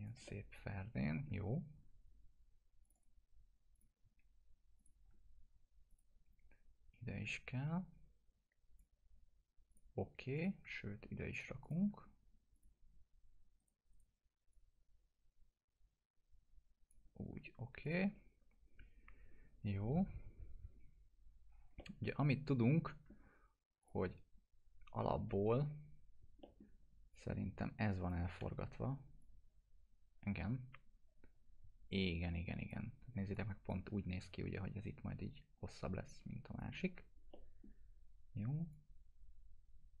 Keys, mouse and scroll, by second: 0.3-1.5 alt+middle drag, 2.8 click, 3.0 click, 4.8 shift+click, 5.9-8.8 drag, 9.7 click, 11.3 shift+click, 12.6 click, 13.6 right click, 14.5-17.0 drag, 17.8 click, 21.8-23.4 alt+middle drag, 23.8 click, 26.4 middle click, 27.4-28.4 click, 28.4 e, 29.2-33.0 drag, 33.3-34.0 drag, 36.1-36.7 click, 37.3 middle click, 38.7-40.0 drag.